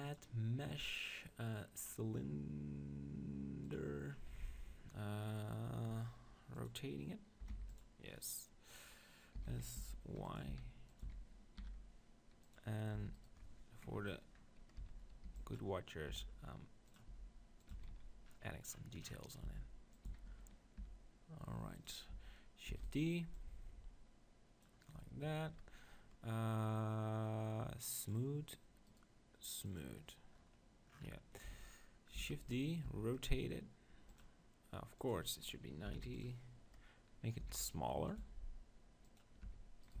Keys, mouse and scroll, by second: 6.5-8.4 drag, 9.3 s, 10.5 s, 11.0-12.9 drag, 11.1 s, 13.0 Tab, 13.2-14.9 drag, 14.9-16.9 middle drag, 14.9-17.9 typing, 16.9-19.5 drag, 17.7 Tab, 19.5 s, 20.0-21.9 drag, 20.1 s, 22.7 shift+d, 22.9-24.7 drag, 23.3-25.2 right drag, 28.0-31.5 drag, 28.9-30.8 right drag, 30.5-32.5 middle drag, 32.2 shift+d, 32.5-34.1 drag, 32.8 r, 35.0-36.9 drag, 37.4 s, 38.3 g, 39.2-40.0 right drag, 39.4 Tab, 39.8-40.0 drag.